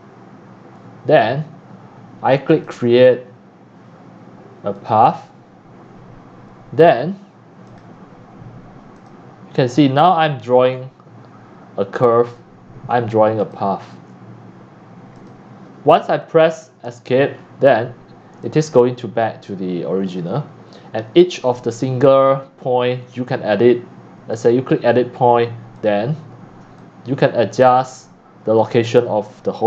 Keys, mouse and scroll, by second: 0.6 click, 1.1 click, 2.5 click, 4.8 click, 5.4-6.1 scroll down 2, 7.7 click, 8.9 click, 9.7 click, 10.4 click, 10.7 middle click, 10.7-11.1 scroll down 5, 11.3 scroll up 5, 12.3 click, 13.4 click, 15.2 click, 15.8 click, 16.9 Escape, 17.3 click, 17.4 middle click, 17.4 scroll down 5, 18.4-20.3 typing, 20.2 drag, 20.4 scroll up 1, 20.5 scroll down 6, 21.4 click, 22.3 scroll down 1, 22.4 scroll up 4, 22.6 middle click, 22.6 scroll, 23.9-24.6 scroll up 1, 24.6 click, 25.8 click, 26.4 click, 26.8 click, 28.6 click.